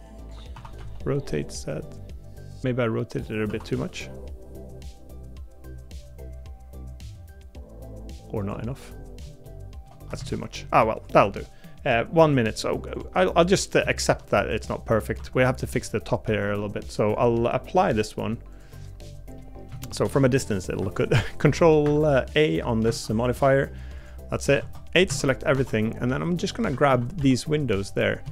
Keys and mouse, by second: 0.2-3.4 drag, 3.4 r, 9.4 shift+middle click, 10.2 ctrl+z, 10.6 middle click, 13.8 shift+middle click, 14.3 middle click, 15.1 Tab, 16.3 Tab, 19.3 middle click, 19.8 shift+middle click, 20.3 middle click, 20.9 ctrl+a, 21.8 Escape, 22.8 ctrl+a, 24.0 click, 24.6 Tab, 25.1 a, 25.5 3, 26.7 a, 26.9 a, 27.2 b.